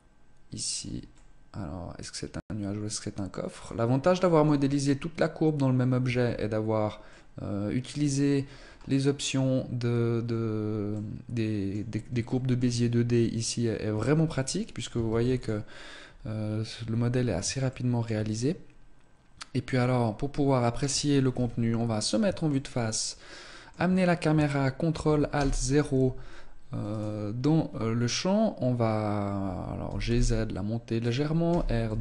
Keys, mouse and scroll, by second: 1.1 middle click, 3.9 middle click, 4.5 Tab, 5.9 Tab, 6.9 middle click, 8.2-8.6 scroll up 8, 10.8 middle click, 12.1 shift+middle click, 12.6 scroll up 2, 12.8 Tab, 13.8 Tab, 14.2 scroll down 2, 14.9 ctrl+s, 17.5 shift+middle click, 19.5-20.6 scroll down 2, 21.2 KP_1, 22.3 shift+middle click, 25.2 ctrl+alt+KP_0, 26.7 right click, 29.6 g, 31.0 click, 31.3 r.